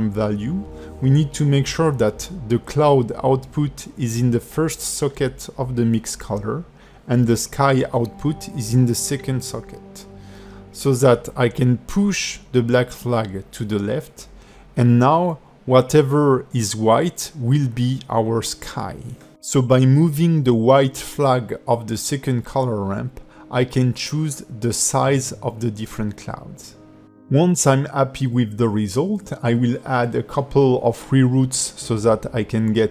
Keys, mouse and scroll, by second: 4.2 click, 12.2 click, 13.4-14.0 scroll down 7, 14.1 middle click, 16.3 click, 22.8 scroll down 4, 23.3 middle click, 26.3 scroll up 2, 27.4 click, 28.8 scroll down 2, 28.9 middle click, 30.2 scroll down 3, 30.3 shift+middle click, 30.6 click, 30.8 scroll down 2, 30.9 shift+middle click, 31.2 click, 31.7 scroll up 3, 31.9-32.9 typing.